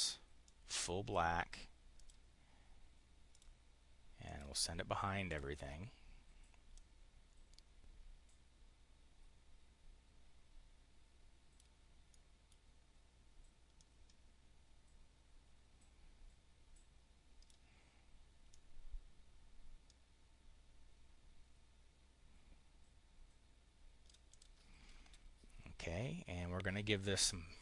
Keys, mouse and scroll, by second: 0.4 click, 1.8 click, 3.2 click, 4.1 click, 5.0 click, 6.6-10.0 drag, 12.0 click, 13.6-17.4 drag, 18.4-24.0 drag, 24.3 click.